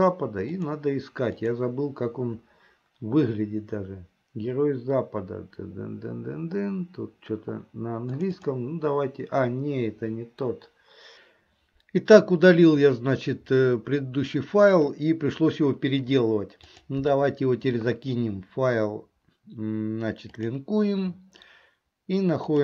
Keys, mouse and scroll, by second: 16.7-20.8 drag.